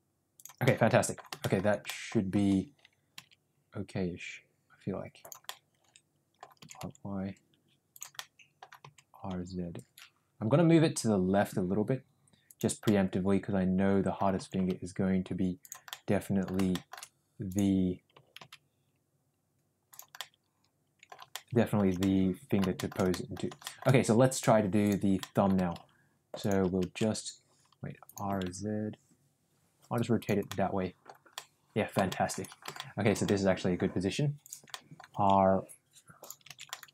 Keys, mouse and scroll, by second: 0.6 scroll up 1, 0.7 middle click, 1.3 shift+middle drag, 1.8 scroll up 1, 1.9 middle click, 2.3 r, 5.4 middle click, 6.6 r, 8.1 middle click, 8.8 r, 12.8-14.3 middle drag, 14.3 r, 15.8 middle click, 16.7 middle click, 18.1 r, 20.1-21.1 middle drag, 21.3-21.7 middle drag, 22.0 middle click, 22.7-23.2 scroll up 2, 22.8 shift+middle click, 23.2 middle click, 23.6 shift+middle click, 24.4 click, 24.9 click, 25.2 middle click, 25.5 r, 27.0 ctrl+z, 28.1 click, 28.3 r, 30.5-31.0 middle drag, 31.3 scroll up 1, 31.4 middle click, 32.0 scroll up 1, 32.1 middle click, 32.7 shift+middle click, 33.2 middle click, 34.5 click, 34.6 middle click, 35.1 r, 36.7 ctrl+z, 36.8 middle click.